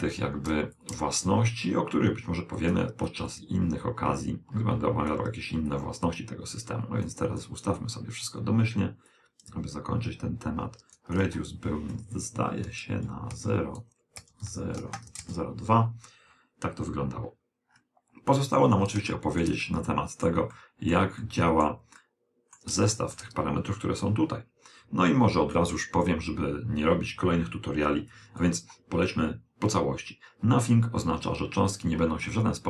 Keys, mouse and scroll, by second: 0.8 click, 3.1 click, 5.8-10.9 drag, 11.2 click, 14.3 Return, 15.0 BackSpace, 17.8-24.6 middle drag, 28.2 click, 32.4-32.6 middle drag.